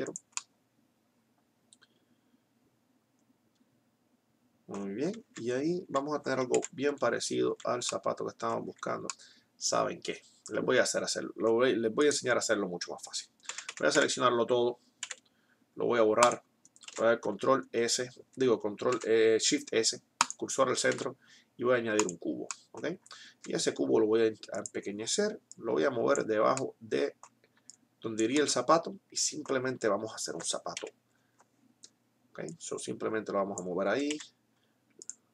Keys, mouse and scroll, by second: 5.2 z, 5.9 z, 6.6 KP_1, 7.6 z, 8.7 z, 10.7 click, 12.1 click, 13.6 a, 13.9 x, 15.1 x, 16.9 shift+a, 18.4 shift+s, 21.1 shift+a, 23.4 s, 25.2 middle click, 25.7-27.1 drag, 30.1 middle click, 31.1 KP_3, 32.7-34.2 drag, 34.2 s.